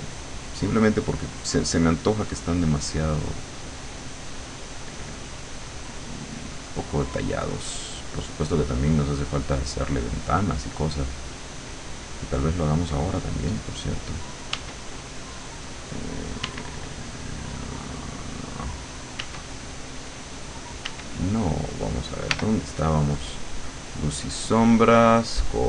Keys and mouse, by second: 0.6 click, 1.0 click, 5.3 click, 8.6 click, 9.1 click, 9.6 click, 11.0 click, 11.4 click, 14.6 w, 16.4 w, 19.2 w, 20.9 w, 22.4 l, 24.2-25.6 drag.